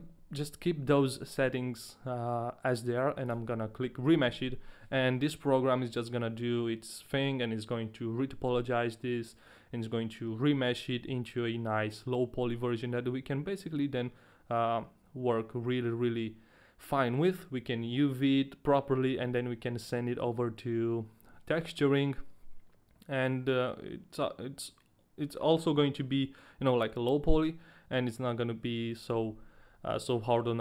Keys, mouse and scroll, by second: 3.3 click.